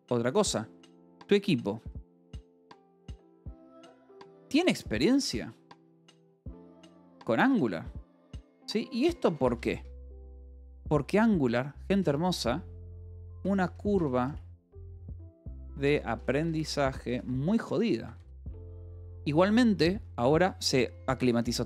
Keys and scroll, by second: 0.6-7.3 typing, 8.8-10.4 typing, 11.9-18.8 typing.